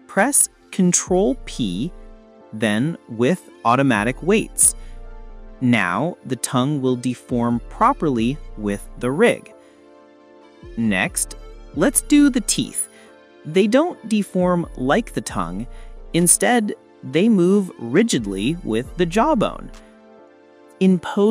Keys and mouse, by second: 0.0 ctrl+p, 10.3 s, 12.8 click, 13.6 click, 17.6 shift+click, 19.9 click.